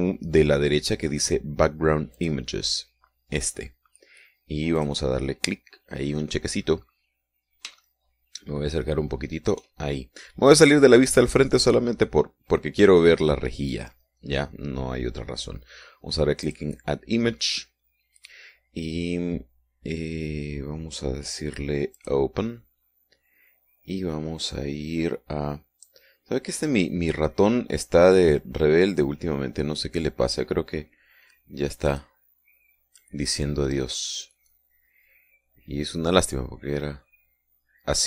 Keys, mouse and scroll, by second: 2.9 click, 5.5 click, 7.4-8.0 scroll up 1, 8.6-10.5 shift+middle drag, 10.9-15.2 middle drag, 17.3 click, 18.3-22.8 scroll down 1, 22.8 click, 32.7 click, 34.8 click.